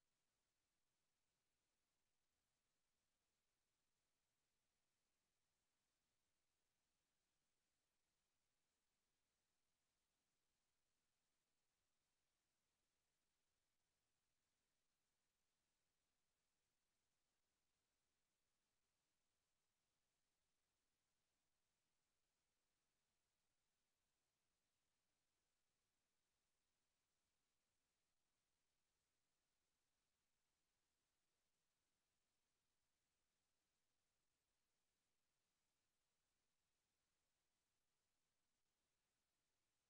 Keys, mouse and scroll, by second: 5.7 KP_0, 10.7 middle click, 14.3 middle click, 22.8 middle click, 26.0 0, 31.6 click, 32.9-34.0 middle drag, 34.0-36.8 drag.